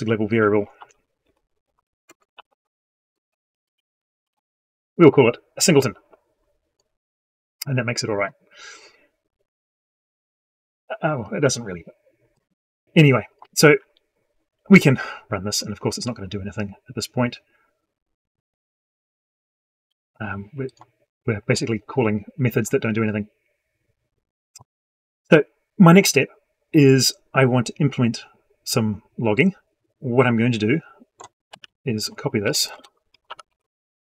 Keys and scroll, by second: 31.3 ctrl+c, 33.3 ctrl+v.